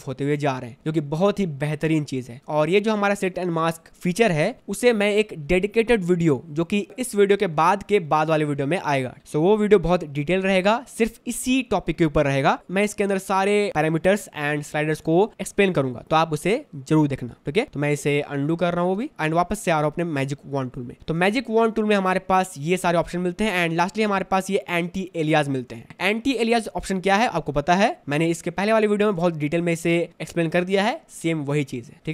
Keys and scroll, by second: 19.1 ctrl+d, 21.0 space, 25.9 space, 27.2 space, 28.4 v, 29.3 space.